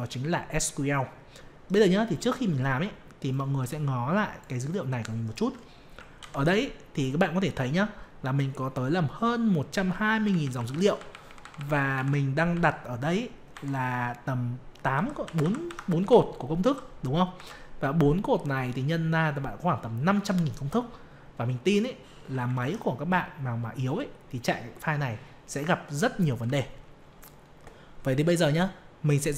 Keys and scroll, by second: 6.2 ctrl+Down, 22.4 ctrl+Up.